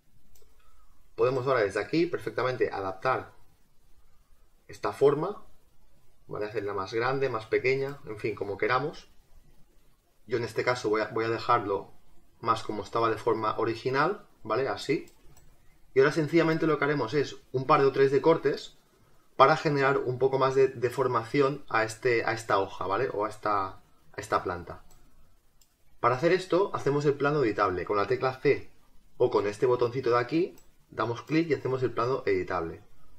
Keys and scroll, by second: 8.7 ctrl+z.